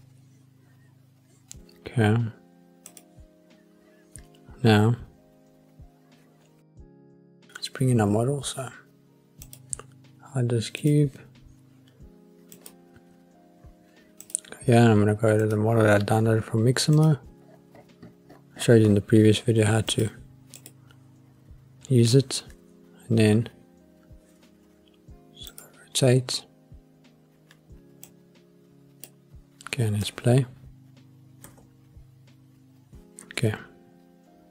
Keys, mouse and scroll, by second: 2.9 click, 9.5 click, 10.8 click, 12.5-15.7 drag, 25.5 click, 28.0 click, 30.0 space, 31.4 space, 33.5 s.